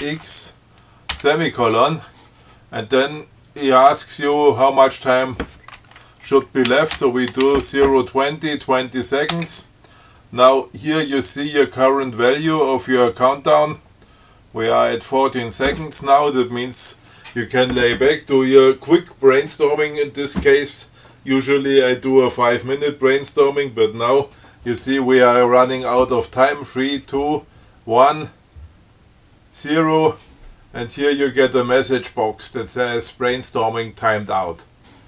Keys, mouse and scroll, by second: 0.3 ctrl+x, 1.4 shift+,, 6.7-8.2 typing, 9.6 Return.